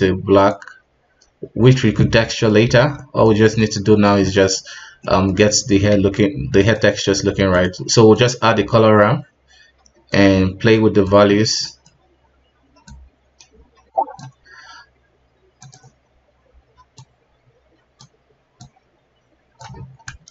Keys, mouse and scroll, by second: 2.3 middle click, 2.6 scroll up 1, 2.7 alt+a, 3.0-8.2 middle drag, 8.2 shift+a, 10.1-11.3 drag, 11.3-11.6 scroll up 2, 11.6-13.0 middle drag, 13.0-19.8 drag, 19.8-20.3 scroll down 3.